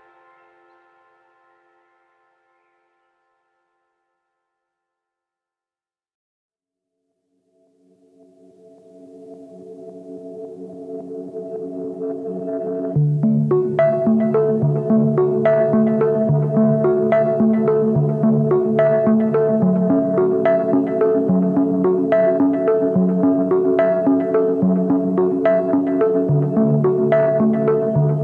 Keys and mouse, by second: 1.1 alt+shift+right click, 1.9 alt+shift+right click, 2.4 alt+shift+right click, 2.8 alt+shift+right click, 3.3 alt+shift+right click, 3.8 alt+shift+right click, 4.3 middle click, 5.3 alt+shift+right click, 5.7 alt+shift+right click, 6.1 alt+shift+right click, 6.5 alt+shift+right click, 7.0 alt+shift+right click, 7.5 alt+shift+right click, 8.1 alt+shift+right click, 8.3-10.8 drag, 8.3-10.8 middle drag, 8.3-10.9 right drag, 10.9 alt+shift+middle click, 12.1 alt+shift+right click, 13.0 alt+shift+right click, 13.5 alt+shift+right click, 14.1 alt+shift+right click, 14.6 alt+shift+right click, 15.1 alt+shift+right click, 15.6 alt+shift+right click, 16.0-17.0 middle drag, 17.0 alt+shift+right click, 17.4 alt+shift+right click, 17.8 alt+shift+right click, 18.2 alt+shift+click, 18.6 alt+shift+click, 19.0 alt+shift+click, 19.2 alt+shift+click, 19.8 alt+shift+click, 20.3 alt+shift+click, 20.8 alt+shift+click, 21.4 alt+shift+click, 21.9 alt+shift+click, 22.5 middle click, 23.4 alt+shift+click, 23.7 x, 24.8 shift+middle click.